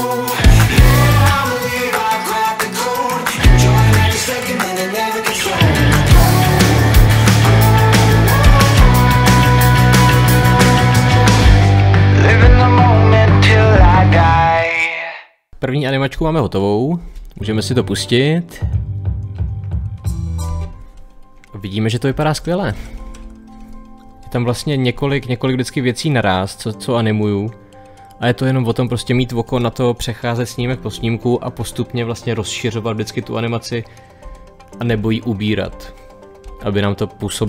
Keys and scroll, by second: 0.0 Page_Up, 0.1 Page_Down, 0.6 Page_Up, 0.7 Page_Down, 0.8 Page_Up, 0.9 Page_Down, 1.1 Page_Up, 1.1 Page_Down, 1.2 Page_Up, 1.2 Page_Down, 1.9 Page_Down, 2.0 Page_Up, 2.1 Page_Down, 2.2 Page_Up, 2.4 Page_Down, 2.8 Page_Down, 3.0 Page_Down, 3.2 Page_Up, 3.2 Page_Down, 3.4 Page_Down, 3.5 Page_Down, 3.6 Page_Up, 3.7 Page_Down, 3.9 Page_Up, 4.1 Page_Down, 4.7 Page_Down, 5.0 Page_Down, 5.3 Page_Down, 5.7 Page_Up, 5.7 Page_Down, 5.8 Page_Down, 6.5 Page_Up, 6.6 Page_Down, 7.3 Page_Up, 7.5 Page_Down, 7.5 Page_Up, 7.6 Page_Down, 7.7 Page_Up, 7.8 Page_Down, 7.9 Page_Up, 7.9 Page_Down, 8.4 Page_Up, 8.5 Page_Down, 8.7 Page_Up, 8.8 Page_Down, 9.4 Page_Up, 9.5 Page_Down, 9.6 Page_Up, 9.7 Page_Down, 10.5 Page_Up, 10.6 Page_Down, 10.8 Page_Up, 10.9 Page_Down, 11.0 Page_Up, 11.0 Page_Down, 11.1 Page_Down, 11.2 Page_Up, 11.4 Page_Down, 11.5 Page_Up, 11.8 Page_Down, 12.0 Page_Down, 12.2 Page_Down, 12.4 Page_Down, 12.5 Page_Down, 12.9 Page_Down, 13.2 Page_Down, 13.7 Page_Up, 13.8 Page_Down, 13.9 Page_Up, 15.3 Page_Down, 17.5 space, 20.3 space, 22.0 Page_Up, 30.4 Page_Down.